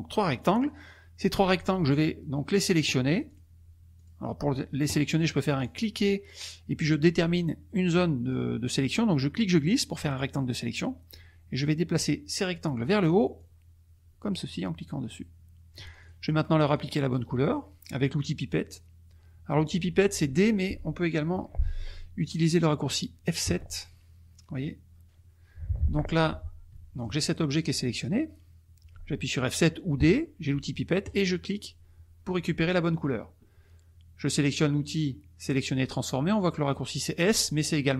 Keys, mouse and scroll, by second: 0.1 click, 3.3 click, 3.9 click, 5.6-10.3 drag, 13.3-15.9 drag, 16.0 click, 16.6 click, 23.4 F7, 26.7 F1, 27.0 click, 29.9 F7, 31.0 click.